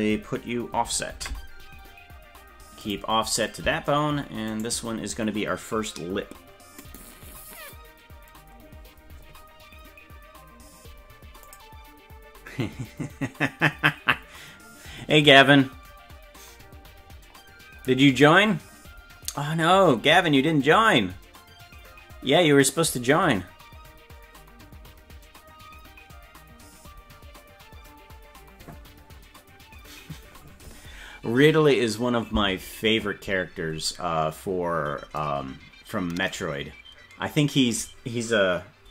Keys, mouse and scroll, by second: 1.1 ctrl+p, 4.5 right click.